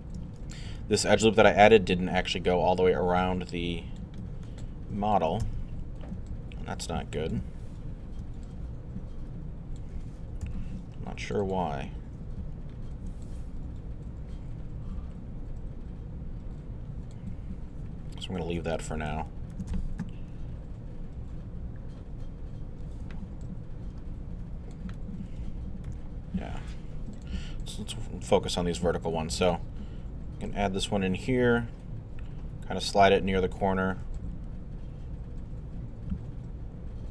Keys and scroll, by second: 0.7 shift+z, 5.4 alt+z, 10.4 alt+w, 11.0 w, 20.0 alt+3, 20.9 3, 22.0 1, 23.0 alt+i.